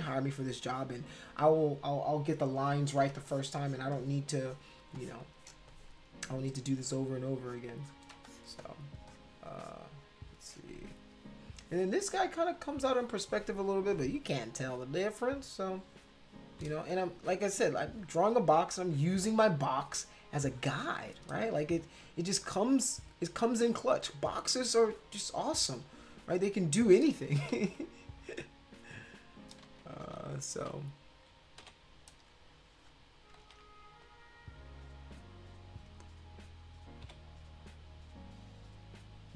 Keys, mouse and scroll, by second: 0.0 click, 0.7 click, 3.2 space, 3.3 click, 3.9 click, 4.5 click, 4.9 click, 6.8 click, 7.4 click, 7.8 click, 8.1 space, 8.2 click, 8.6 click, 9.1 click, 9.6 click, 14.8 click, 15.7 click, 16.7 ctrl+z, 17.2 ctrl+z, 17.8 click, 19.1 click, 20.5 click, 21.1 click, 21.4 ctrl+z, 21.8 click, 22.4 click, 25.0 click, 25.7 click, 26.2 click, 26.8 click, 27.1 ctrl+z, 27.5 ctrl+z, 28.1 click, 28.8 click, 29.6 ctrl+z, 30.0 ctrl+z, 30.6 ctrl+z, 31.6 [, 32.2 click, 33.4 ctrl+z, 34.0-35.8 drag, 37.0 ], 37.6-39.3 drag.